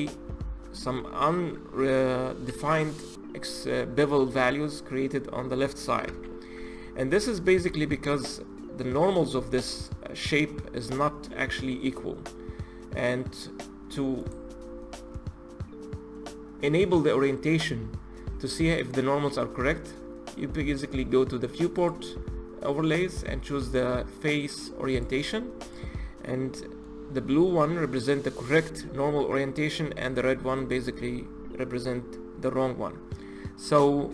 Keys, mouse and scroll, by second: 6.0 ctrl+z, 6.5-7.6 middle drag, 7.6 Tab, 9.2 z, 9.7 click, 14.1-17.2 drag, 21.6-24.8 drag, 25.5 click, 26.3-30.5 middle drag, 30.5 click.